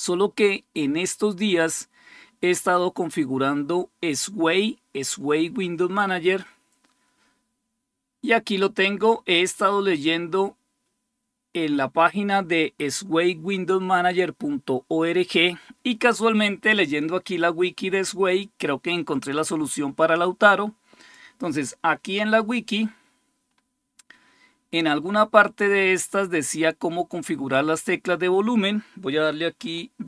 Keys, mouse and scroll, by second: 9.7-23.3 drag, 23.3-24.2 scroll down 1, 24.2-24.8 scroll down 1, 24.8-25.4 scroll down 1, 25.4-26.6 scroll down 1, 26.6-29.0 scroll down 1, 29.0-29.4 scroll down 1, 29.9 ctrl+f.